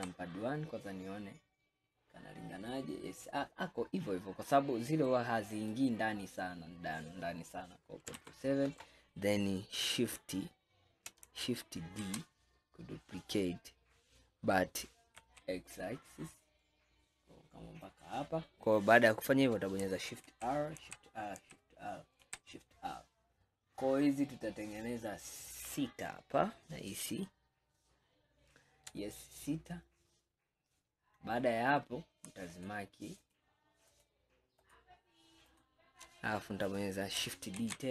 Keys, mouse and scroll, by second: 0.0 KP_1, 1.0-4.4 scroll up 1, 4.4 scroll up 1, 4.4 scroll down 1, 5.2-8.2 middle drag, 8.2 ctrl+KP_7, 12.1 shift+d, 20.3 shift+r, 20.9 shift+r, 22.3 shift+r, 32.6 shift+click, 33.3 shift+click, 34.0 shift+click, 34.6 shift+click, 35.5 shift+click, 37.6 shift+d.